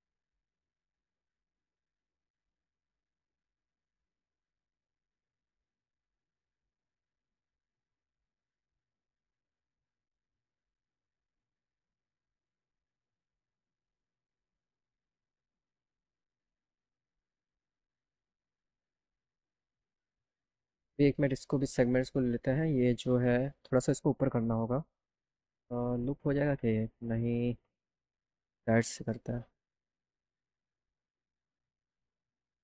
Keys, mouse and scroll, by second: 0.3 ctrl+click, 0.9 ctrl+click, 1.4 ctrl+click, 2.0 ctrl+click, 2.5 ctrl+click, 6.1 click, 6.1 right click, 20.8 scroll up 2, 21.9 click, 23.7 click, 23.9 click, 25.9 click, 32.1 click.